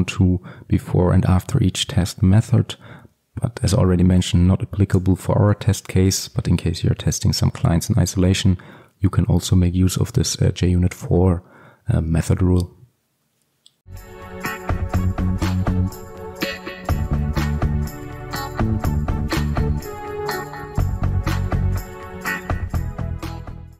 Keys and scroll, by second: 5.5 ctrl+x.